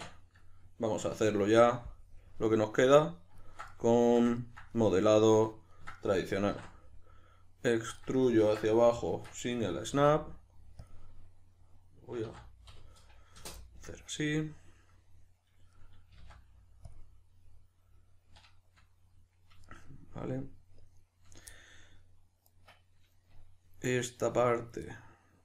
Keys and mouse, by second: 1.1 Tab, 2.2 KP_Decimal, 2.4-8.1 middle drag, 6.4 e, 8.1 right click, 8.3 ctrl+z, 9.1 shift+Tab, 10.9 click, 12.2 s, 13.5 Return, 13.6-16.9 middle drag, 16.1 g, 16.9 click, 17.0-25.4 middle drag.